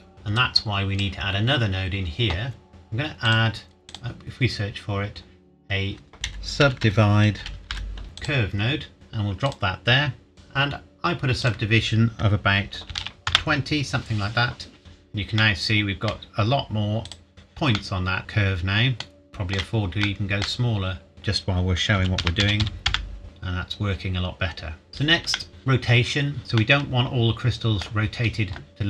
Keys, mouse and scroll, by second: 0.1 middle click, 0.4 click, 2.7 shift+middle click, 3.3 click, 4.5 click, 6.1-7.7 typing, 8.2 click, 10.3-10.9 scroll up 1, 11.4 click, 12.9 KP_2, 13.3 KP_Enter, 15.4 middle click, 17.1 click, 17.3-17.8 scroll up 1, 17.8 middle click, 21.1 click, 22.0 KP_Decimal, 22.2 KP_0, 22.4 KP_2, 22.6 KP_5, 22.9 KP_Enter, 23.2 click, 24.9 ctrl+s, 25.3 shift+middle click, 26.5 middle click.